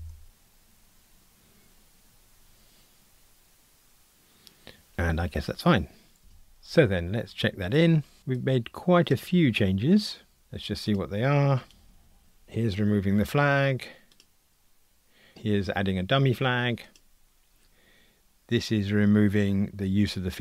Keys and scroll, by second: 11.8 super+d.